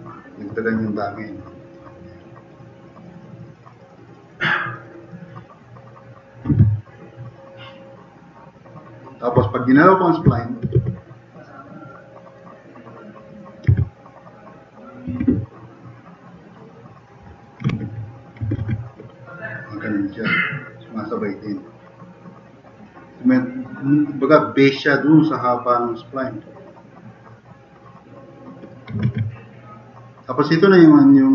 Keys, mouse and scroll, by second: 7.3-8.5 drag, 8.6 click, 10.2 click, 10.7 q, 13.7 1, 15.2 e, 18.6 ctrl+z, 19.3-20.2 drag, 20.8-21.6 drag, 25.1 click, 26.1 click, 27.1 click, 28.0 click, 29.1 ctrl+z.